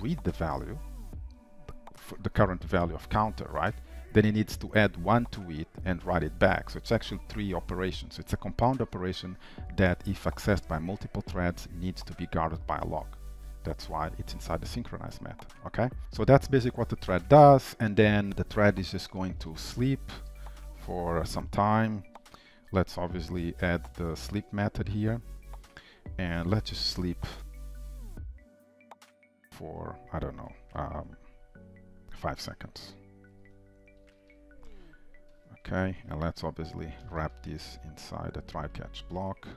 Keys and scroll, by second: 0.0 ctrl+w, 18.3 shift+Return, 23.7 alt+Return, 25.9 shift+Return, 28.8 Return, 37.9 alt+Return.